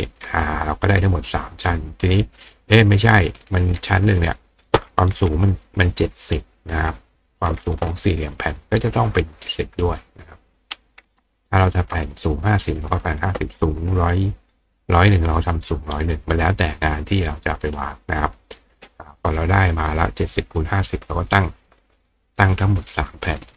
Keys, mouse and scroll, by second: 0.1 click, 3.5-4.6 drag, 5.7-6.7 drag, 7.2 click, 9.8 click, 20.8 click, 22.1-23.4 drag, 22.4 right click.